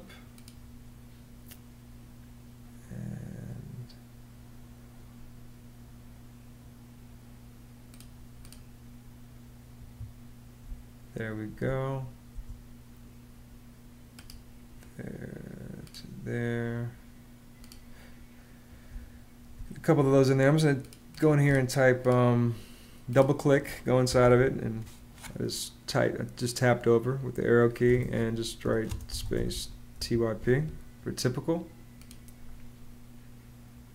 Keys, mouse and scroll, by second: 9.5 Escape, 10.4 space, 12.1 space, 18.7 space, 23.8 Right, 27.7-29.8 typing, 29.7 click.